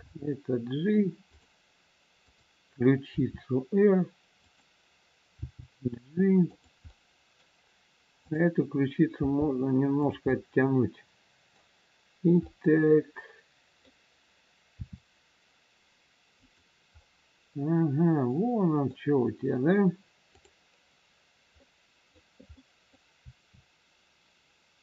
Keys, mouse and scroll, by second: 0.0 g, 2.2 click, 3.1 r, 5.3 g, 6.8 middle click, 8.2 click, 9.1 g, 10.3 middle click, 14.7 middle click, 14.7 r, 16.8 scroll up 1, 16.9 middle click, 20.3 click, 21.6 middle click, 23.2 middle click, 23.2 r.